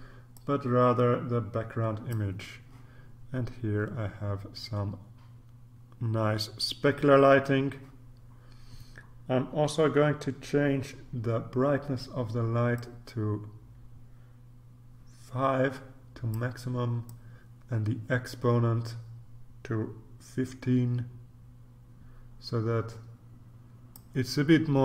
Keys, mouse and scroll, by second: 0.3-2.7 drag, 12.7-16.9 drag, 17.1-24.5 drag.